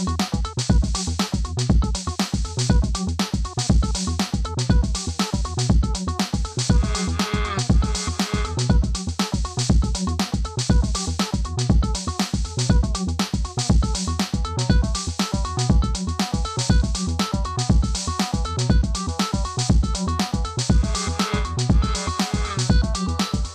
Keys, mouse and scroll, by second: 0.4 Return, 3.3 right click, 4.2 click, 6.7 right click, 8.2-13.2 drag, 13.2 right click, 14.0-21.9 drag, 21.9 ctrl+d, 22.5 right click, 23.1-23.5 drag.